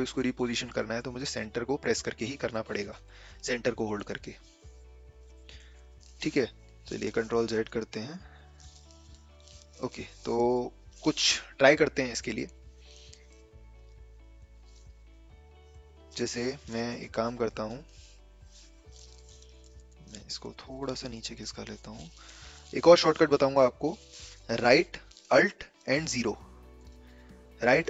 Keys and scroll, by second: 6.5 a, 6.9 ctrl+z, 7.1 ctrl+z, 7.5 ctrl+z, 7.8 ctrl+z, 8.2 ctrl+z, 21.8 v, 25.8 v, 26.7 ctrl+alt+0.